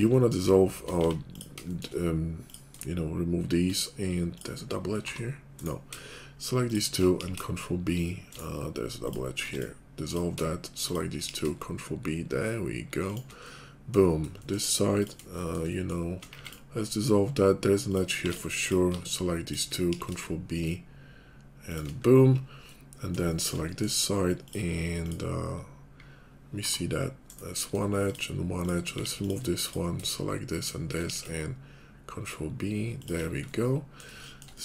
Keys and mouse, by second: 0.0 shift+click, 0.7 middle click, 1.0 x, 1.6 shift+click, 1.9 middle click, 2.7 shift+click, 3.6 middle click, 5.0 g, 7.1 ctrl+b, 9.1 click, 9.5 x, 10.1 click, 10.3 shift+click, 11.2 ctrl+b, 11.2-13.3 ctrl+drag, 13.3-28.0 middle drag, 16.3 x, 18.1 x, 19.9 ctrl+b, 26.5 g, 28.0 click, 28.1-30.5 middle drag, 28.9 x, 30.5 shift+click, 30.6 shift+middle click, 31.1 ctrl+b, 31.1 ctrl+click, 31.2 middle click, 31.4-33.2 shift+drag, 33.2 middle click, 34.1 shift+click, 34.4 middle click.